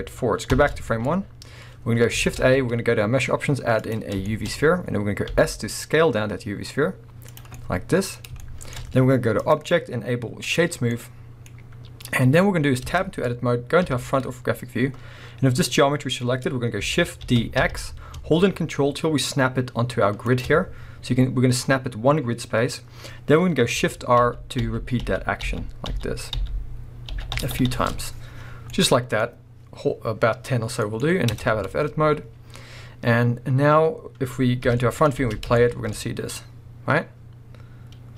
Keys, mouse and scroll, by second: 0.5 shift+Left, 1.9 scroll up 1, 2.2 shift+a, 4.3 shift+middle click, 4.6 scroll up 1, 5.3 s, 7.4-9.4 middle drag, 7.4 click, 8.1 scroll down 1, 9.4-10.9 drag, 10.9 middle click, 11.4-12.1 scroll up 1, 12.1-12.8 scroll down 1, 12.8 b, 13.8 KP_1, 14.8-15.9 scroll up 1, 17.2 shift+d, 20.4 click, 20.6-24.2 scroll down 1, 24.2 shift+r, 28.4 scroll down 1, 28.9-31.3 middle drag, 29.4-30.8 scroll up 2, 31.3 Tab, 31.8-34.2 scroll up 2, 34.2-34.7 scroll up 1, 34.7 KP_1, 35.2 space.